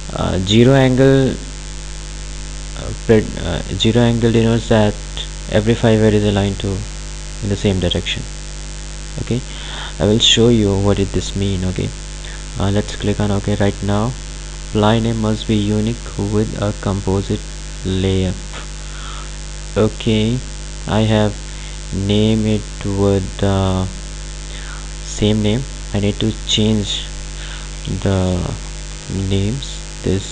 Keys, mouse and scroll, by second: 9.7 click, 13.0 click, 19.6 click, 27.8-29.6 typing.